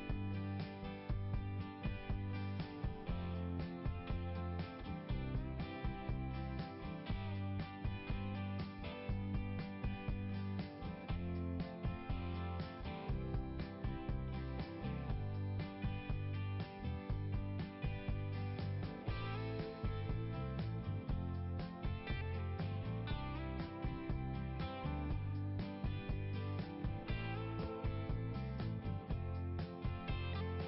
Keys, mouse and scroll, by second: 0.0 Return, 1.4 click, 3.4 click, 5.1 click, 5.3 click, 5.8 click, 6.1 click, 6.5 click, 6.6 click, 13.5 click, 15.2 click, 16.3 click, 20.1 click, 22.1 scroll down 1, 26.5 click, 28.0 click.